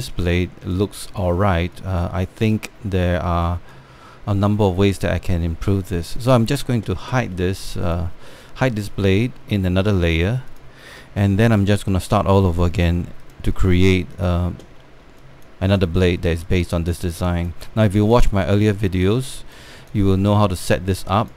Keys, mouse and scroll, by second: 0.5 alt+3, 1.4 alt+click, 1.8 click, 2.4 alt+click, 2.8 alt+middle click, 3.3 alt+click, 4.4-6.0 alt+drag, 6.1-6.6 scroll down 2, 8.5-10.5 drag, 11.2 click, 12.1 alt+middle click, 12.5 scroll up 1, 13.9 click, 15.5 alt+middle click, 15.9 alt+click, 16.4 alt+click, 17.2 alt+click, 17.8 scroll down 1, 17.8 alt+click, 18.3 scroll up 1, 18.6 alt+click, 19.3 alt+middle click, 19.7 alt+scroll, 20.0 alt+click, 20.5 alt+scroll down 1, 20.6 click.